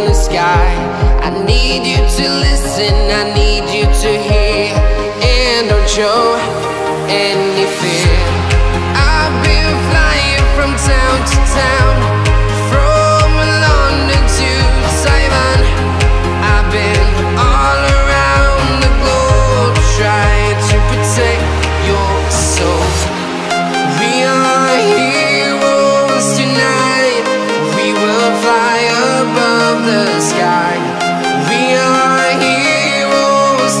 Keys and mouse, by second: 2.4-2.7 shift+drag, 2.7 shift+middle click, 3.7 click, 4.8 click, 6.1 ctrl+click, 10.4 shift+middle drag, 10.8-11.3 middle drag, 11.9 shift+drag, 12.1 shift+middle click, 14.4 ctrl+p, 15.7 click, 17.1-17.9 drag, 19.2 click, 23.5-26.2 drag, 25.2 BackSpace, 27.7 space, 29.8 space, 32.4-33.8 drag.